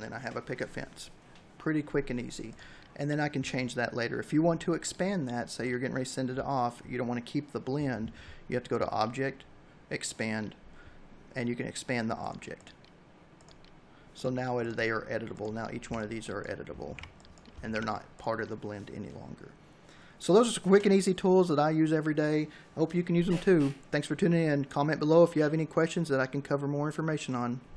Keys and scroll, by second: 14.5 a, 15.5 ctrl+z.